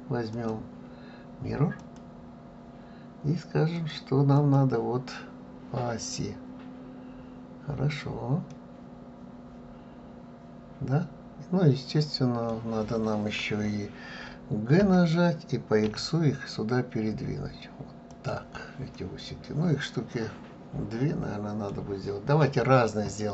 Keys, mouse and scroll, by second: 0.3-3.3 drag, 3.7 click, 4.3 click, 8.5-11.5 middle drag, 14.8 g, 18.9-21.9 middle drag.